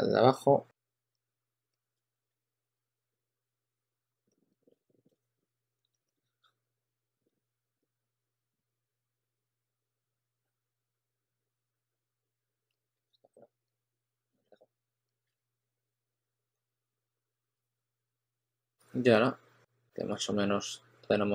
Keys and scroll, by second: 0.5-3.8 typing, 2.1 super+a, 4.6 super+z, 5.3-6.9 typing, 8.7 s, 12.3-13.4 typing, 15.2 super+z.